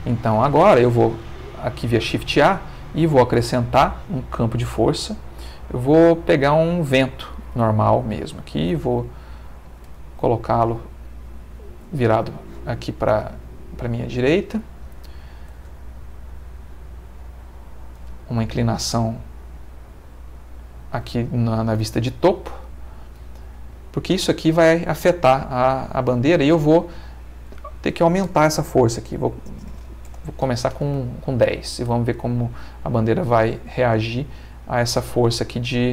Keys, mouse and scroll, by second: 0.8 shift+a, 6.9 click, 8.7 r, 9.7 click, 9.9 g, 10.4 click, 10.7 r, 11.7 click, 14.7 click, 15.7 r, 17.7 click, 18.1 g, 18.7 click, 18.9 r, 20.3 click, 23.5 click, 27.4 click, 29.7 1, 29.7 0, 30.0 Return, 30.8 space.